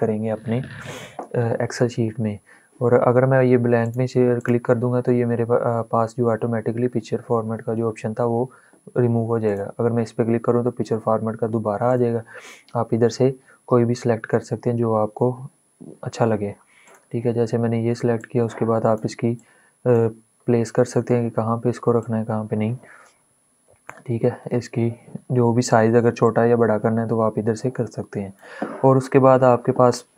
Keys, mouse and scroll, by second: 3.6 click, 9.1 click, 11.6 click, 16.5 click, 16.7-20.2 drag, 20.7 scroll up 1, 21.7-24.2 drag, 24.2 ctrl+z, 25.9-30.1 drag.